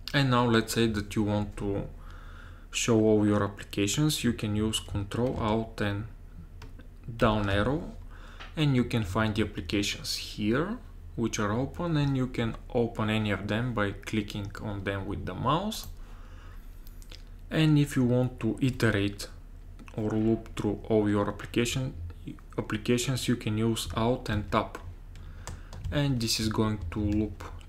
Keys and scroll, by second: 7.4 ctrl+alt+Down, 24.4 alt+Tab, 25.9 alt+Tab, 26.5 alt+Tab, 26.8 alt+Tab, 27.2 alt+Tab.